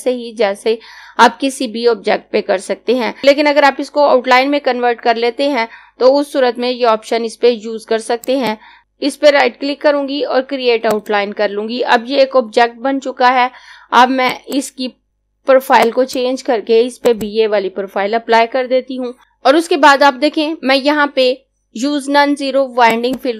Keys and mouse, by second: 8.2 click, 8.8 right click, 10.9 click, 14.2 click, 22.8 click.